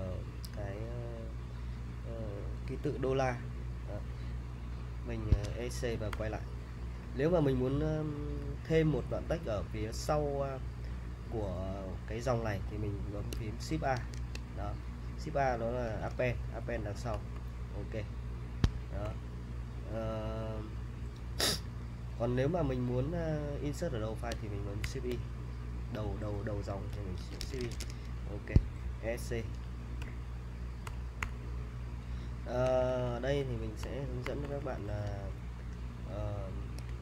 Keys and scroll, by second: 5.4 Escape, 6.1 u, 14.0 shift+a, 15.6-20.2 typing, 21.4 typing, 24.8 l, 27.0-28.3 typing, 28.5 Escape, 30.0-31.2 typing, 32.6-34.7 typing, 36.8 super+Tab.